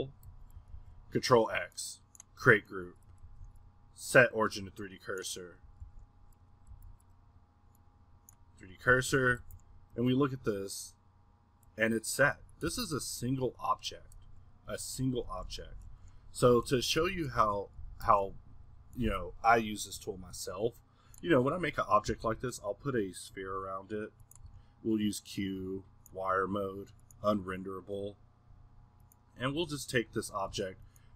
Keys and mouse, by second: 0.3 a, 2.6 middle click, 4.2-5.8 middle drag, 7.7-9.2 middle drag, 8.9 a, 10.4-12.7 middle drag, 12.7 drag, 12.7 g, 13.7 middle click, 15.3 Escape, 16.1 Escape, 17.0 a, 21.2 middle click, 21.4-22.1 middle drag, 22.1 s, 23.1-24.4 middle drag, 24.4 q, 25.5-26.4 middle drag, 26.4 F6, 29.1-31.1 drag.